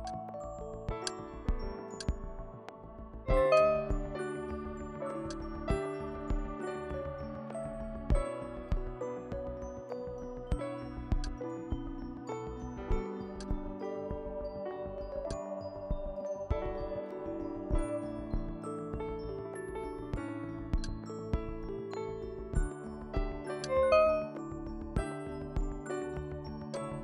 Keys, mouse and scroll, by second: 4.3 KP_2, 4.6 KP_0, 5.3-7.5 drag, 6.9 KP_3, 7.3 KP_0, 8.4 KP_Enter, 11.1 click, 13.4 click, 15.3-19.3 drag, 20.8 click, 23.6-25.6 drag, 25.2 KP_2, 25.6 KP_0, 26.8-27.0 drag.